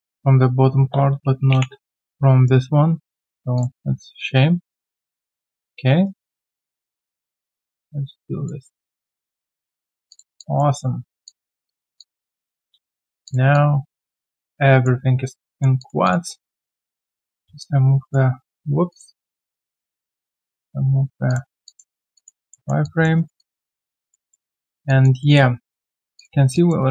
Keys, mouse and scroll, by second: 2.0 Delete, 2.0 right click, 6.0 shift+right click, 9.1 right click, 9.6-10.0 scroll down 1, 10.3 alt+click, 10.7 alt+right click, 11.2 alt+right click, 11.2 alt+click, 11.9 alt+click, 13.5 alt+click, 15.0 alt+scroll down 1, 15.4 alt+middle click, 15.8 alt+click, 17.6 alt+click, 22.5 alt+middle click, 22.8 alt+click, 23.1 alt+right click, 23.3 alt+click, 23.6 alt+middle click, 23.9 alt+click, 24.3 alt+middle click, 24.6 alt+right click, 24.8 alt+click, 25.2 alt+middle click, 25.5 alt+right click, 26.5 alt+click, 26.8 alt+click.